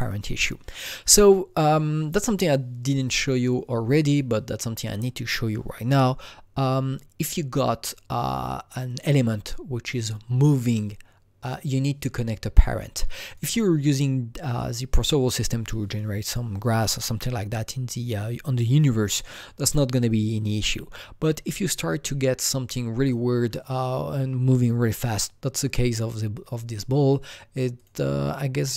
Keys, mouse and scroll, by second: 0.0 click, 12.9-17.1 drag, 23.0-25.7 drag, 26.7-27.8 drag, 27.8 click.